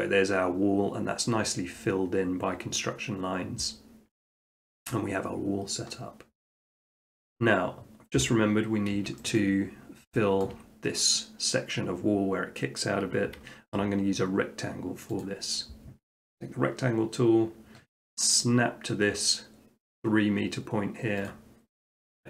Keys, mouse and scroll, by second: 3.9 middle click, 4.5 shift+middle click, 5.9-7.1 middle drag, 8.2 7, 9.4-10.5 shift+middle drag, 10.5 scroll, 15.2 click, 21.3 click.